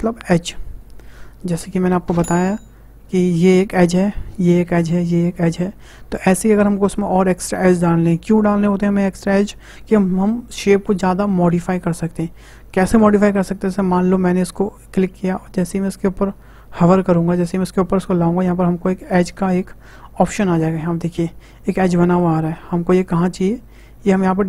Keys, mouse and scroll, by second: 14.4-17.4 drag, 21.8-24.4 middle drag.